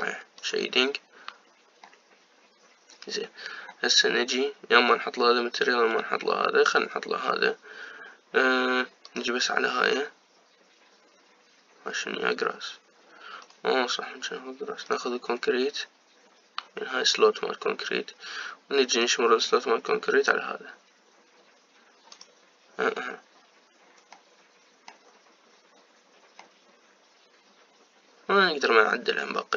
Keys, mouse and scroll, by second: 1.7 click, 2.7-10.4 middle drag, 10.4 click, 16.0-18.4 drag, 21.7 click, 23.4 click, 25.1 middle click, 25.9-27.3 scroll up 3, 27.3-29.5 middle drag.